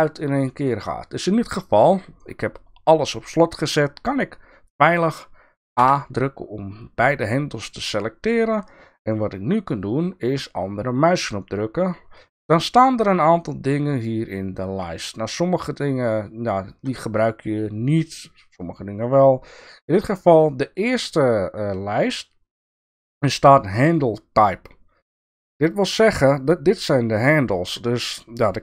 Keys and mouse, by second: 5.8 a, 10.9-19.0 right drag, 22.7-26.4 drag.